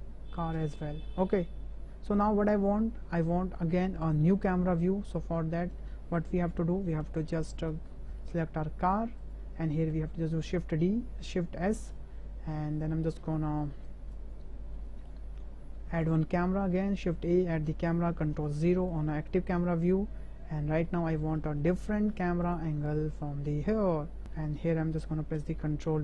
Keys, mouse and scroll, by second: 0.4 space, 6.4 KP_0, 7.3-7.6 drag, 7.9 shift+click, 9.3 click, 10.4 shift+s, 12.6-13.0 shift+drag, 13.5 shift+v, 13.8 shift+b, 14.7 shift+drag, 15.9 shift+a, 18.4 ctrl+KP_0, 20.9-21.3 drag, 21.6-22.1 shift+drag, 22.4 click, 22.7-23.1 drag, 23.1-24.2 middle drag, 24.2 ctrl+KP_0.